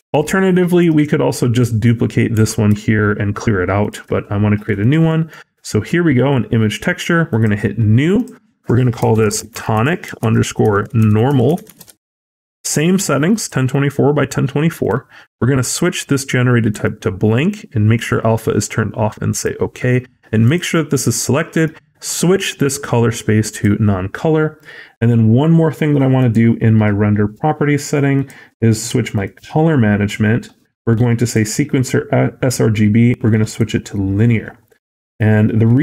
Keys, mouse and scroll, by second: 2.3 g, 5.2 middle click, 5.5-7.2 scroll up 4.